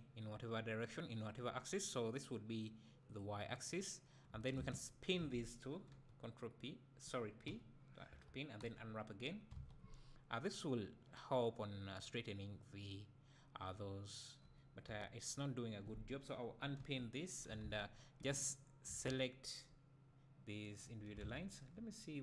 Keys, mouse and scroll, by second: 3.2-4.8 right drag, 4.8 alt+shift+click, 5.9 p, 7.5 p, 8.1 a, 9.3 u, 9.5 alt+a, 14.9 a, 17.7 a, 18.5 alt+click, 21.2 alt+a, 21.4 scroll up 1, 21.7 `.